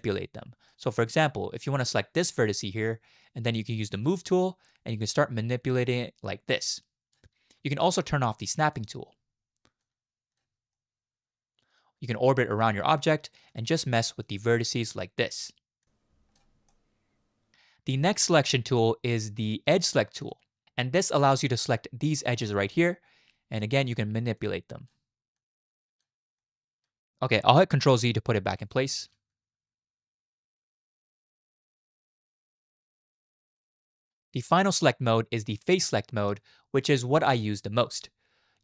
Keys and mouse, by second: 0.7 middle click, 2.3-5.9 drag, 6.6 click, 8.7 click, 9.8 click, 10.7-13.0 middle drag, 13.5 click, 13.8 middle click, 14.9 click, 15.9 click, 16.7 middle click, 20.2 click, 21.3 middle click, 22.2 right click, 22.7 middle click, 24.5 right click, 25.4 right click, 26.4 middle click, 28.1 ctrl+z, 28.3 ctrl+z, 28.6 ctrl+z, 28.8 ctrl+z, 28.9 ctrl+z, 29.3 ctrl+z, 29.5 ctrl+z, 29.7 ctrl+z, 29.8 ctrl+z, 30.0 ctrl+z, 30.2 ctrl+z, 30.4 ctrl+z, 30.6 ctrl+z, 30.7 ctrl+z, 32.4 ctrl+z, 33.5 click, 37.4-38.6 middle drag.